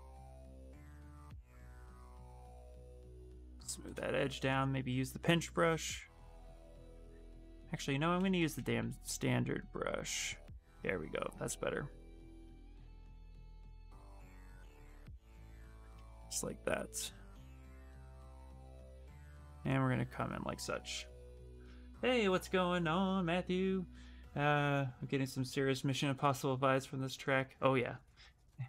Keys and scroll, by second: 0.9 ctrl+z, 1.1 ctrl+z, 3.9-5.3 typing, 7.9-8.8 typing, 11.5 space.